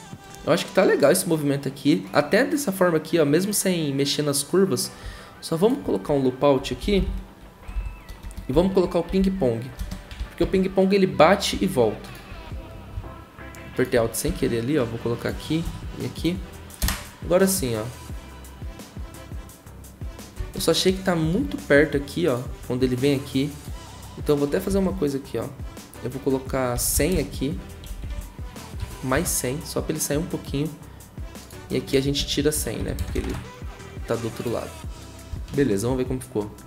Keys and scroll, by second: 6.3-7.5 typing, 7.6 Down, 7.7 Down, 8.2 Return, 8.7-10.3 typing, 10.4 ctrl+c, 14.2 ctrl+v, 15.6 ctrl+v, 16.8 0, 24.7 Right, 26.5-29.1 typing, 32.2 Right, 32.3-33.6 typing, 35.4 0.